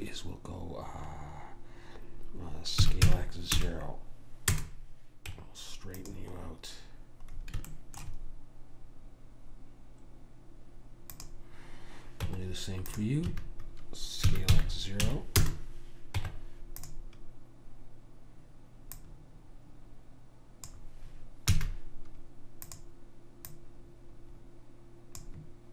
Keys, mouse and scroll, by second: 3.0 s, 5.4 Tab, 11.2 click, 12.4 Tab, 13.4 a, 14.4 s, 16.3 Tab, 19.0 click, 21.6 a, 22.8-25.5 drag.